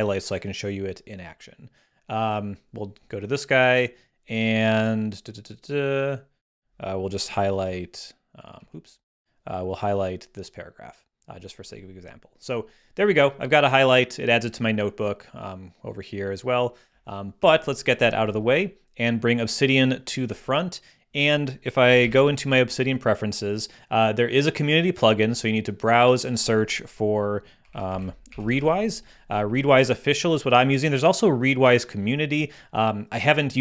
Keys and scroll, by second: 7.6 h, 17.4 super+h, 22.0 super+,, 27.3-29.1 typing.